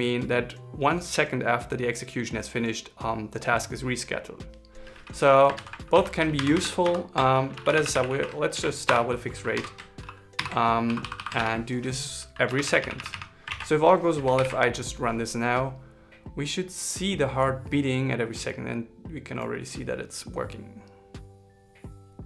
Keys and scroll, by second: 5.9 super+Right, 8.9 shift+r, 10.7 shift+-, 11.7 shift+l, 13.8 super+s, 14.7 ctrl+shift+r.